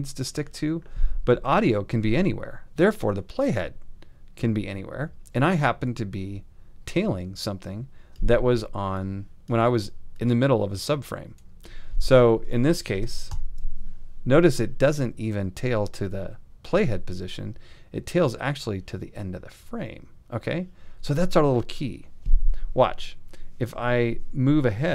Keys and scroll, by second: 13.3 alt+].